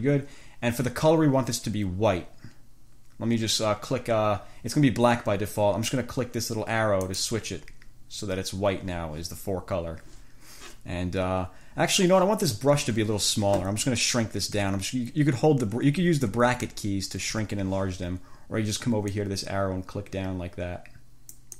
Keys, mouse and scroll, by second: 7.3 click, 14.8 [, 19.4-21.5 drag.